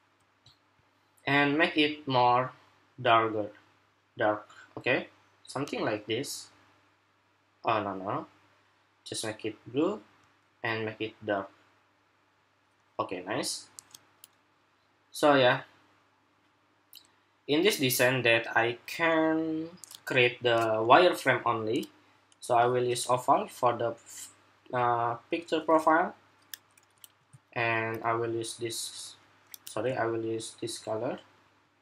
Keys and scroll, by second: 26.9 ctrl+c, 29.5 ctrl+c.